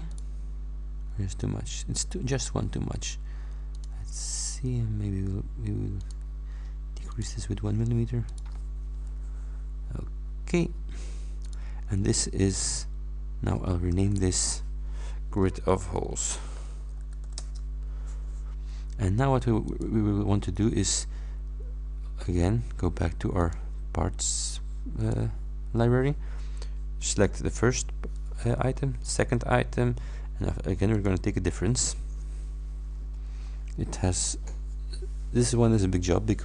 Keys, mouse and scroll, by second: 0.1 click, 3.8 click, 6.1 click, 7.1 click, 7.7 scroll down 1, 8.3 click, 11.5 click, 12.5 click, 14.2 F2, 15.4-17.8 typing, 19.7 click, 23.5 click, 25.1 click, 27.1 click, 29.1 ctrl+click, 31.0 click.